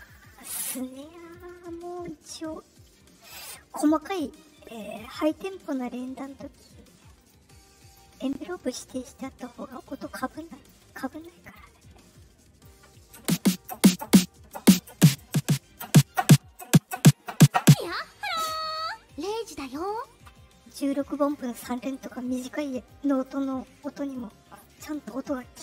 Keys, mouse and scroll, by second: 1.2 click, 7.1 click, 9.1 click, 9.7 click, 10.3 click, 11.1 click, 12.0 click, 19.2 click, 19.8 click, 20.6 click, 21.1 click, 23.1 click, 24.0 click, 24.5 click.